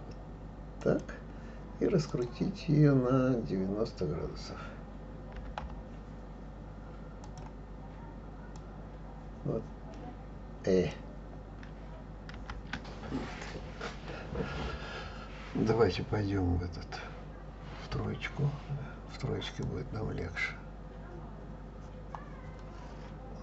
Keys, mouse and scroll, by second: 2.1 click, 5.4 9, 5.6 0, 7.3 click, 8.6-11.6 drag, 12.4 ctrl+z, 17.9 KP_3, 19.6-22.6 drag.